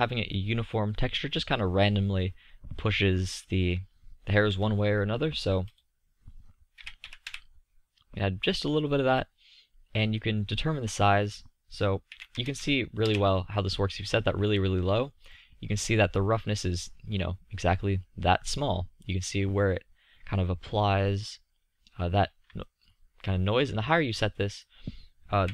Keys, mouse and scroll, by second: 5.8-7.9 middle drag, 8.6-11.0 middle drag, 11.2-13.0 middle drag, 15.3 middle click, 15.9-16.4 middle drag, 22.5 middle drag, 23.0-25.5 middle drag.